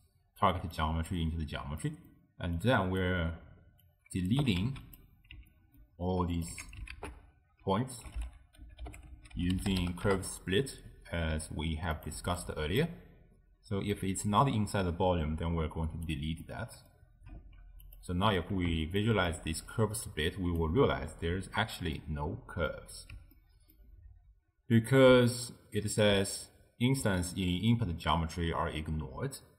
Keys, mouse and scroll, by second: 0.8 click, 1.9 middle click, 2.6 click, 3.4-3.9 scroll down 1, 3.9 click, 4.4 g, 5.6-6.4 ctrl+middle drag, 6.4 click, 6.6 x, 7.0 ctrl+a, 12.4 click, 14.0 click, 16.5-17.9 middle drag, 17.9 alt+shift+click, 19.1-20.1 ctrl+middle drag, 20.1 click, 21.0-26.6 middle drag.